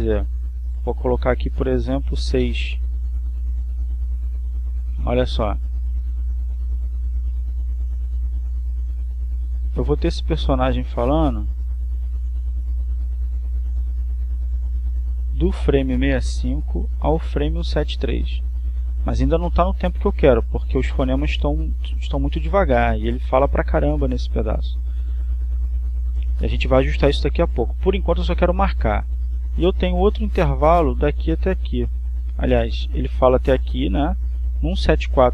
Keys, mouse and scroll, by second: 2.3 click, 3.6 6, 3.9 Return, 6.5-31.1 drag, 31.5-35.3 drag.